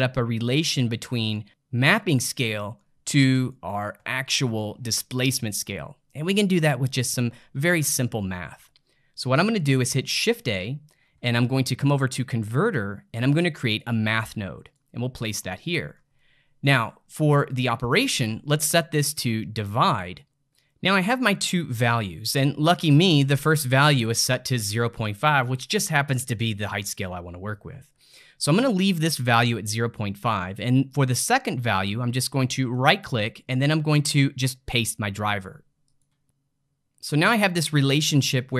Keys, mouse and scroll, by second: 2.3-7.6 middle drag, 8.0-10.2 ctrl+middle drag, 10.2 shift+a, 15.6-17.9 ctrl+middle drag, 17.9-20.3 drag, 20.7-23.8 middle drag, 27.9-30.9 middle drag, 32.6-35.7 right drag.